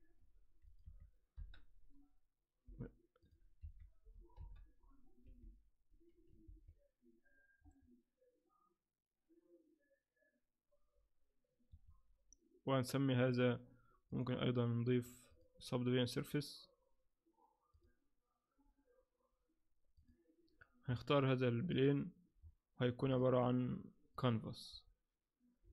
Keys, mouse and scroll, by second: 0.7 click, 2.5 i, 3.2 click, 5.3 i, 6.4 alt+a, 7.6-8.4 scroll up 3, 11.7 Escape, 13.2 click, 14.1-20.8 click, 20.8-21.7 scroll down 7, 21.7 click, 22.4-23.0 scroll up 3, 23.0 scroll up 2, 23.1 click, 24.1 click, 25.6-25.7 scroll down 5.